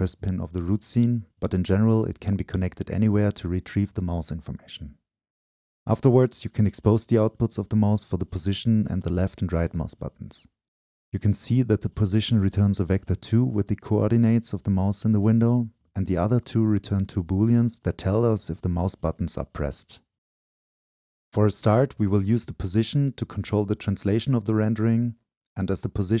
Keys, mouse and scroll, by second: 0.4 ctrl+z, 1.4-2.8 drag, 3.0-9.9 shift+drag, 9.9-10.3 scroll up 2, 10.3-12.3 drag, 13.5-14.1 drag, 14.1-14.8 middle drag, 14.8-15.4 drag, 15.4-16.5 middle drag, 16.5-18.7 drag, 18.7 right click, 19.7 click, 20.2 right click, 20.6 click, 21.3-23.2 right drag, 23.2-23.6 drag, 23.6-26.2 right drag.